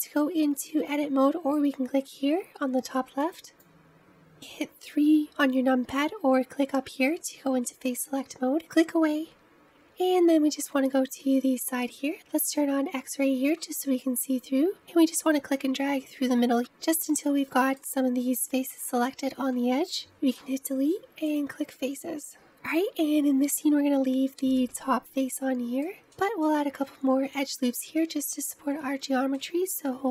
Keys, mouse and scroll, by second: 5.0 3, 8.0 click, 9.7-16.6 middle drag, 17.5-21.3 middle drag, 21.3 Delete, 22.5-24.7 middle drag, 24.7-25.2 scroll up 2, 25.2-30.1 middle drag.